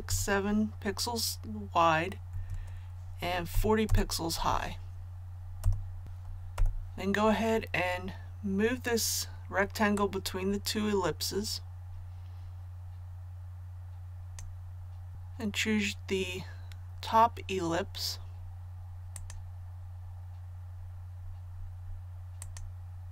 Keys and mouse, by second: 0.0-0.1 typing, 2.3 Tab, 3.5 KP_4, 3.8 KP_0, 4.3 Tab, 6.5 v, 9.9-14.9 drag, 19.7 click.